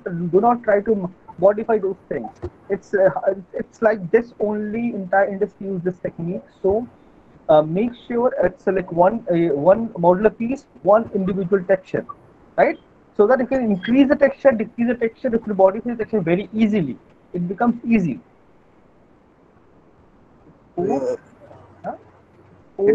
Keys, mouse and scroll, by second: 19.6 click, 19.6 alt+middle click, 20.1 click.